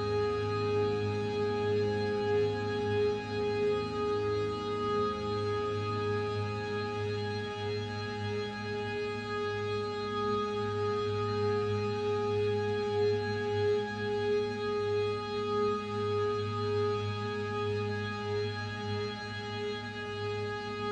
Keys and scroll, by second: 1.7 z, 3.4 z.